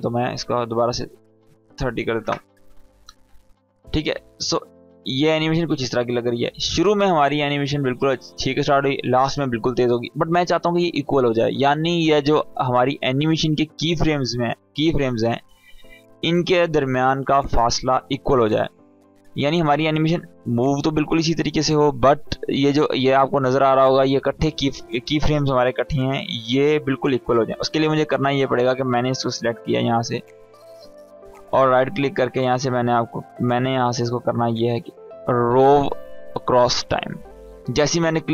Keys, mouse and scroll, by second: 0.7 click, 3.1 space, 5.3 space, 5.9-6.5 click, 7.3 space, 9.7 space, 12.3-14.1 scroll up 1, 21.2-23.0 scroll down 1, 24.3-25.3 scroll up 1, 28.1-29.6 drag, 31.4 right click, 33.0 click, 33.6 right click, 33.7 right click, 36.4 click.